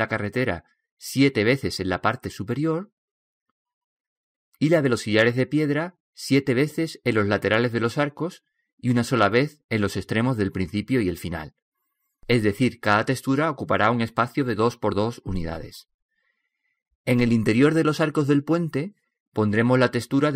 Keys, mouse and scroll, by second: 13.7 middle click, 13.9-19.9 middle drag.